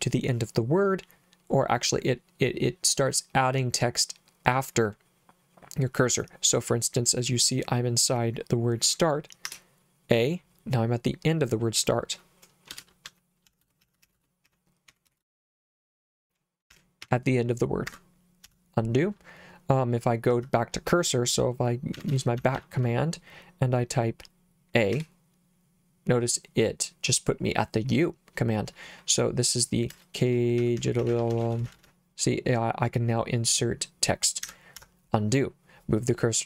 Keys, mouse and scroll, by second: 9.5 a, 12.7-18.5 typing, 17.9 Escape, 20.3 h, 21.9 b, 22.1 b, 22.4 b, 22.5 b, 24.9 a, 28.9-32.3 typing, 34.4 Escape, 34.8 u.